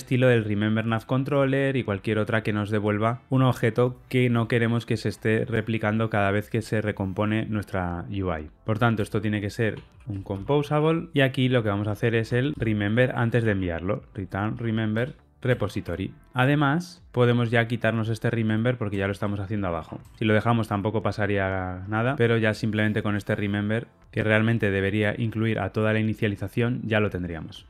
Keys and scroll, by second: 11.1 Return, 14.9 Return, 15.4 BackSpace, 22.0 alt+super+l.